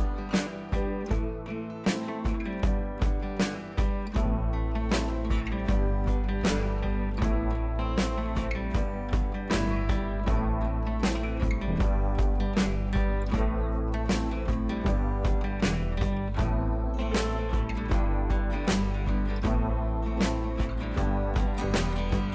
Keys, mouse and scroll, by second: 0.1 click, 1.9-22.3 drag.